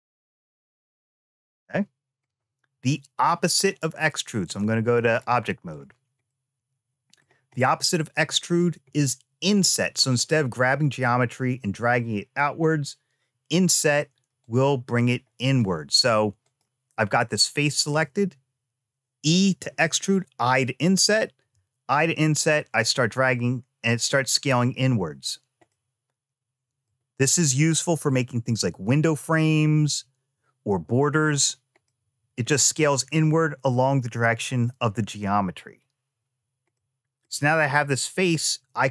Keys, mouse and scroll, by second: 4.2 click, 5.5 click, 6.0 middle click, 7.3 click, 8.7 shift+middle click, 14.2-15.4 drag, 16.2 click, 21.1 i, 25.4-26.6 middle drag, 31.6 middle click, 36.5 middle click.